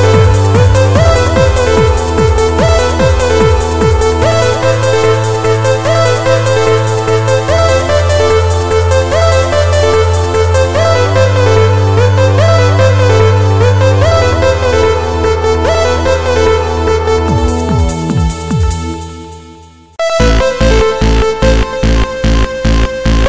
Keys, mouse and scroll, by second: 2.8 click, 3.2 click.